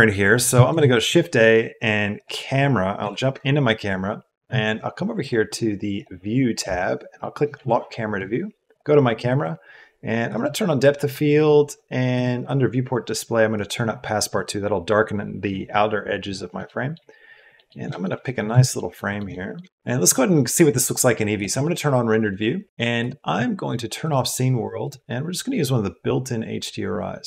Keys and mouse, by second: 0.6 shift+a, 3.0 KP_0, 5.1 middle click, 5.9 click, 7.1 click, 8.6 click, 10.2-12.2 drag, 13.6 click, 16.6 shift+drag, 17.5 middle click, 17.9 shift+click, 18.7 shift+middle click, 19.2 middle drag, 19.7 shift+middle click, 23.0-27.2 drag.